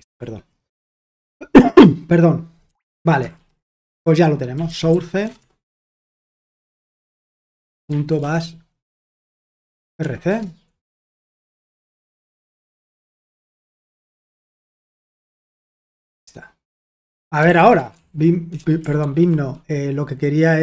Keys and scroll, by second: 0.0-0.3 typing, 2.6 Escape, 2.9-10.5 typing, 13.4 ctrl+l, 13.8-15.2 typing, 17.1-18.5 typing, 19.0 ctrl+w.